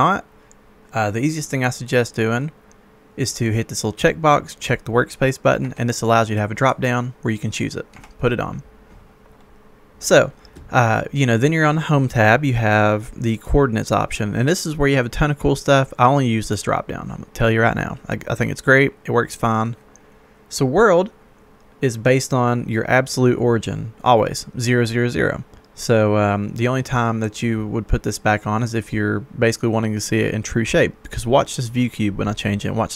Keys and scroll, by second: 5.5 Escape, 8.0 Escape.